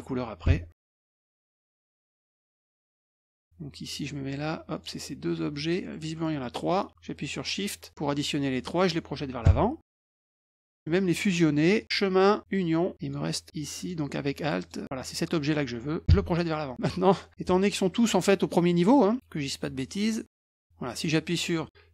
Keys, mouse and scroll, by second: 3.9 click, 4.7 shift+click, 5.8 middle click, 6.0 middle click, 6.1 middle click, 6.1 scroll up 4, 6.3 middle click, 7.6 shift+click, 11.8 click, 12.5 click, 13.0 click, 13.7 alt+click, 14.6 alt+click, 19.4 click, 20.3 shift+click, 21.0 click.